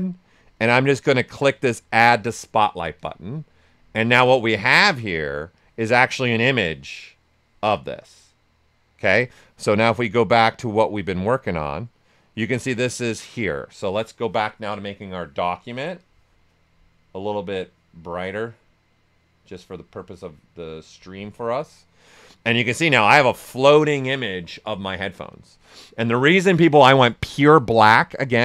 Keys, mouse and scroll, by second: 2.9 ctrl+click, 5.7-28.4 ctrl+drag.